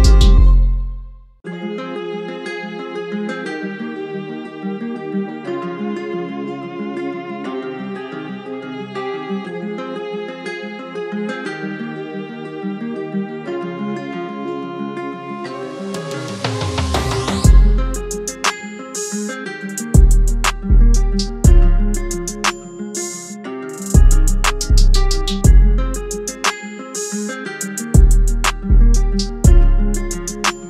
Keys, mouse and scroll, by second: 9.0 alt+click, 15.2-16.7 typing, 20.6 typing, 21.6 double click.